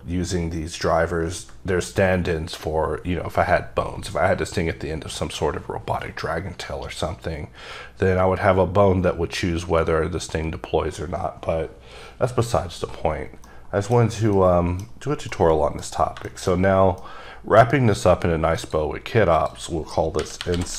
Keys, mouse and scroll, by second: 13.5 scroll down 1, 13.6 middle click, 14.5 middle click, 15.4 middle click, 16.4 shift+middle click, 16.6 middle click, 16.8 scroll down 1, 17.1 middle click, 18.7 click, 19.5 click, 20.3-20.7 typing.